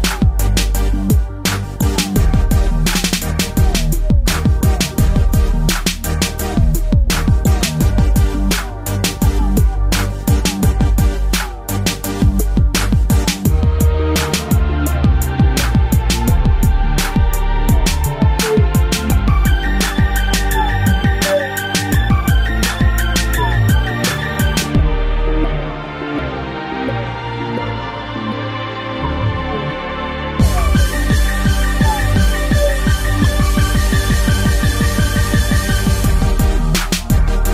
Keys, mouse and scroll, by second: 14.2 middle click, 16.4 click, 16.5 click, 17.5 scroll down 1, 17.9 shift+middle click, 18.1 shift+middle click, 18.3 middle click, 18.5 middle click, 18.9 ctrl+s, 22.2 shift+middle click, 22.7 scroll up 1, 24.2 click, 24.3 click, 25.7 click, 25.8 click, 26.6 click, 26.9 click, 28.0 click, 28.1 click, 28.9 click, 29.0 click, 30.2 click, 30.3 click, 31.7 click.